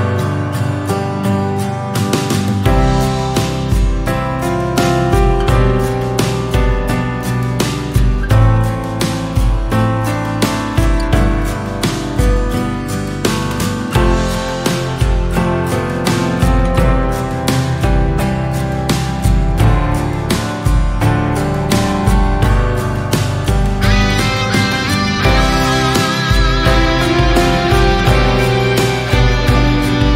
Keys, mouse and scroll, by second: 3.1 Tab, 3.9-5.0 right drag, 5.0 click, 5.4-6.6 middle drag, 6.6 Tab, 7.0-7.6 scroll down 1, 7.6-8.2 shift+middle drag, 8.2 click, 12.8-13.8 middle drag, 13.8 Tab, 14.1 middle click, 14.3-15.0 scroll up 3, 15.0-15.4 scroll down 1, 15.4 middle click, 15.9-17.0 scroll up 1, 17.0 /, 17.8 click, 18.8 KP_1, 19.6-22.0 scroll up 2, 23.5 shift+d, 24.9-29.6 drag, 30.0-30.1 right drag.